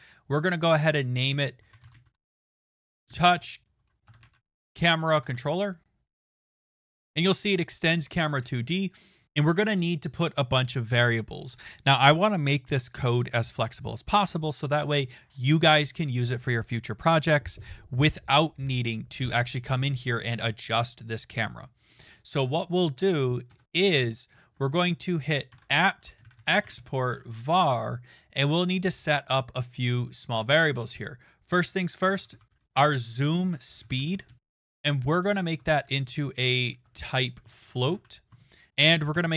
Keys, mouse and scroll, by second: 0.3 click, 1.3-2.5 typing, 3.8-4.7 typing, 6.0-6.8 typing, 7.0 click, 7.3 click, 8.0 click, 23.5 Return, 25.5-27.7 typing, 31.8-35.4 typing, 36.7-39.1 typing.